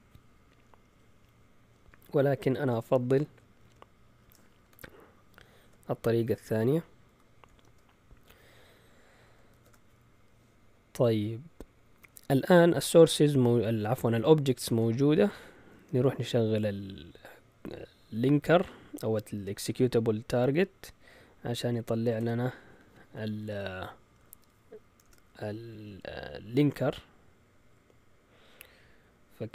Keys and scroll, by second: 3.6 Up, 4.6 Home, 7.0 #, 7.6 space, 8.2 Down, 9.5 shift+super+z, 15.8 Up, 16.1 Up, 16.4 Up, 21.5 Down, 22.2 Tab, 25.0 Return, 25.7 Up.